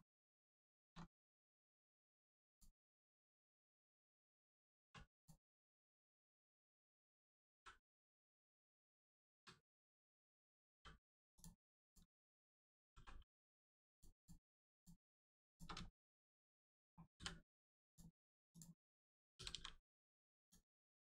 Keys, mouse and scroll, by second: 0.2 scroll up 1, 0.7 shift+middle click, 0.9 scroll up 1, 1.5 click, 1.8 shift+middle click, 2.4 click, 3.6 middle click, 4.8 1, 5.1 click, 5.6 shift+click, 7.5 n, 10.7 m, 11.3 click, 12.7 g, 13.9 click, 15.4 shift+click, 15.8 shift+middle click, 17.1 middle click, 17.8 click, 19.5 g, 20.3 click.